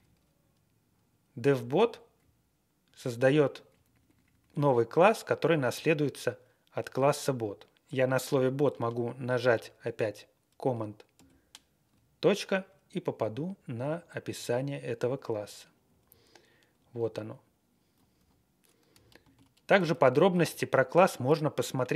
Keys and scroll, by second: 1.5 Down, 1.7 Down, 2.1 Right, 2.4 Right, 2.4 Right, 2.5 Right, 2.5 Right, 2.5 Right, 2.6 Right, 2.7 Right, 2.7 Right, 2.7 Right, 2.8 Right, 3.1 Right, 3.9 Right, 4.5 Right, 5.7 Left, 11.1 alt+., 13.7 Right, 15.3-16.4 Down, 16.5-17.0 scroll down 13, 17.0 scroll up 2, 17.3 Up, 17.3 Up, 17.3-17.7 Up, 17.8 Up, 17.9 Up, 18.1 Up, 19.2 alt+f, 19.9 alt+,.